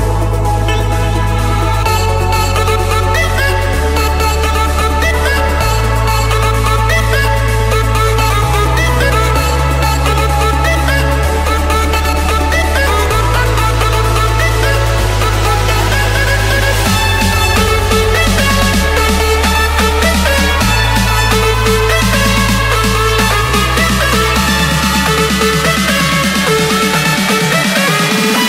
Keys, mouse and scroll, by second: 0.4 scroll, 2.8 i, 4.0 Return, 8.5 click, 10.8 click, 12.8-13.7 scroll, 15.8-17.0 typing, 17.6 Return, 18.6 Escape, 19.4-20.5 middle drag, 20.4 typing, 20.6 Return, 23.8-24.9 drag, 24.8-25.4 typing, 25.9 Return, 27.0 Escape, 28.3 click.